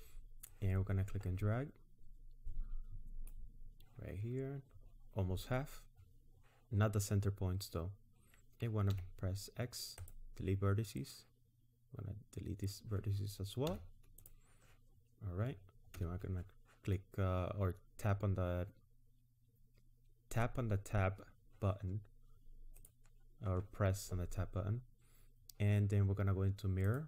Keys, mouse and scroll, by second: 0.5 click, 8.9 x, 11.0 click, 13.7 x, 16.0 Tab, 22.8 click.